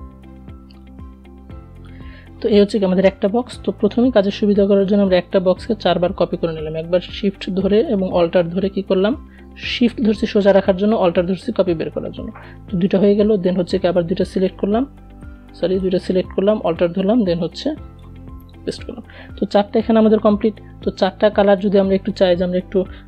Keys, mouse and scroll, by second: 1.5 v, 3.2-15.0 alt+drag, 15.0-16.9 alt+drag, 22.3-23.0 drag.